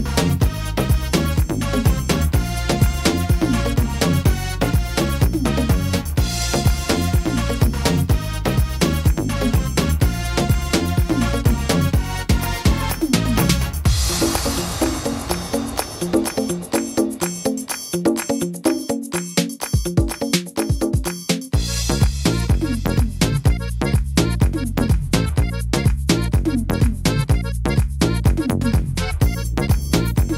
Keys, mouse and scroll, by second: 1.3 ctrl+r, 2.5 right click, 4.6 click, 5.3 right click, 5.9 shift+right click, 6.9 s, 8.6 right click, 9.2 shift+right click, 10.3 click, 12.2 middle click, 13.2 right click, 14.5 right click, 15.0 shift+right click, 15.2 shift+right click, 15.8 click, 17.6 middle click, 18.0 scroll up 2, 18.4 middle click, 18.6-19.0 scroll down 2, 19.0 middle click, 20.1 scroll up 1, 20.4 middle click, 21.2 ctrl+r, 24.1 ctrl+r, 26.4 ctrl+r, 28.0 right click, 28.6 shift+right click, 29.2 right click, 29.8 right click.